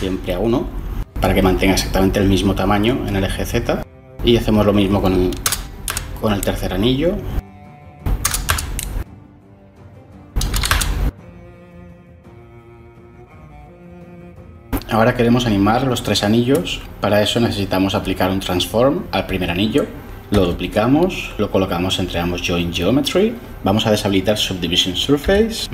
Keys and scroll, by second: 5.4 0, 5.9 Return, 8.2 0, 8.4 Return, 10.5 1, 10.7 Return, 20.2 shift+d, 24.6 m.